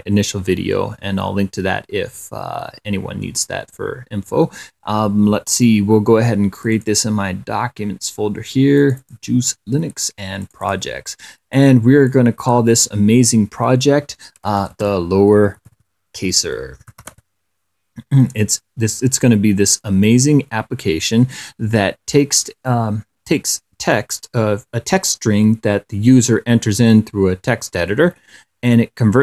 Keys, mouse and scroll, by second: 6.9 click, 9.1 click, 10.7 click, 11.8 click, 12.4 click, 14.7-17.9 typing, 20.3 click.